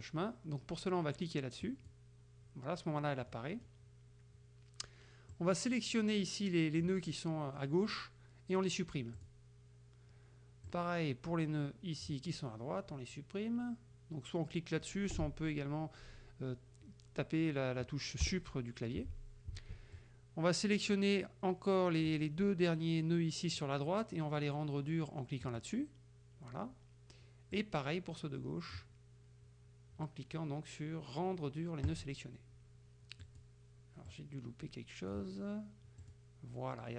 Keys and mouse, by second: 1.7 click, 3.3 middle click, 5.3 click, 9.2 click, 10.8 click, 18.3 Delete, 20.0 click, 25.5 click, 27.6 click, 32.0 click, 33.3 click, 34.2 click, 36.1 click.